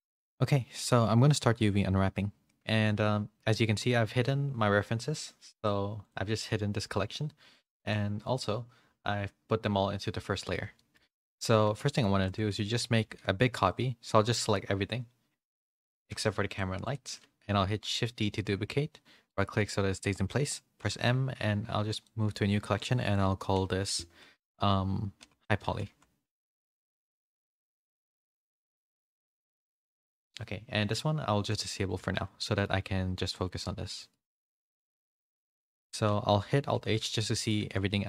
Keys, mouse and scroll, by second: 5.5 click, 6.0 click, 8.0 click, 10.7 shift+middle click, 10.7 a, 11.8 middle click, 11.8 a, 12.7 shift+middle click, 16.8 ctrl+click, 18.5 shift+d, 20.8 shift+d, 20.8 m, 31.5 click, 32.4 shift+middle click, 32.4 shift+a, 33.5 g, 34.9 a, 35.1 a, 36.7 alt+h, 37.1 middle click, 37.6 a.